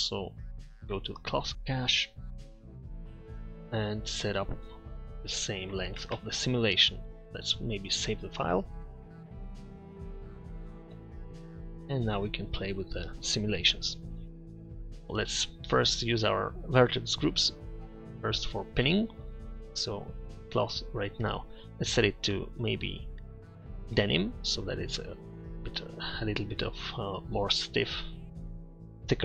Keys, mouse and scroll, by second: 2.1 middle click, 6.2 KP_0.